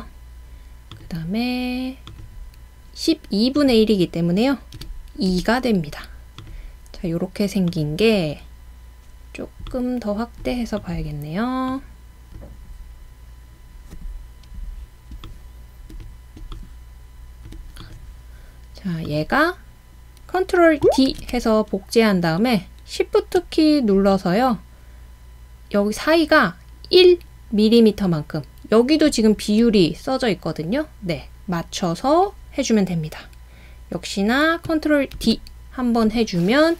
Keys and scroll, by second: 4.8 typing, 5.3 Return, 14.1 typing, 21.1 super+d, 35.2 super+d.